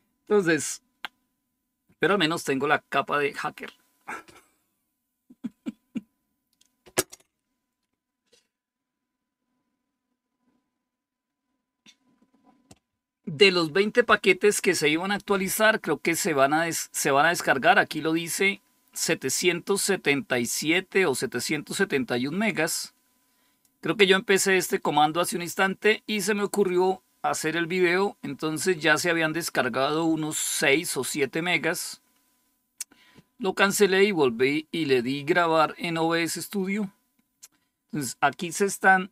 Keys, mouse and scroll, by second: 22.3-24.3 drag.